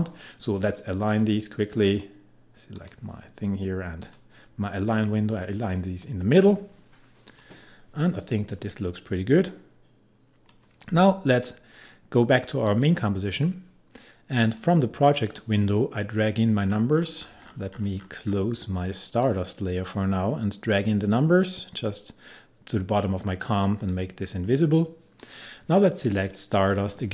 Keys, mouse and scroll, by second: 1.1 click, 7.3-12.7 drag, 16.7-18.1 scroll up 1, 19.2-23.9 drag.